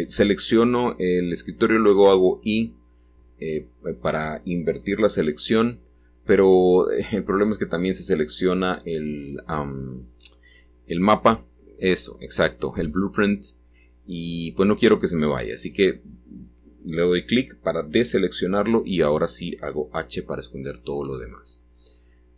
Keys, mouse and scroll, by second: 0.9-3.8 shift+drag, 3.8-5.4 shift+middle drag, 5.6-9.9 shift+middle drag, 12.2 shift+click, 12.5 shift+click, 15.3 h, 19.5-20.6 drag, 21.4 g.